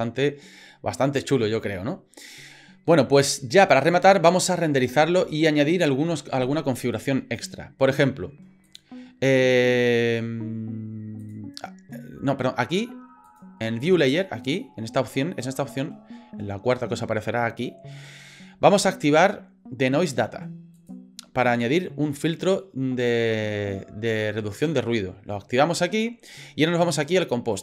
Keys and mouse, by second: 8.6 click, 11.2 click, 13.2 click, 20.7 click.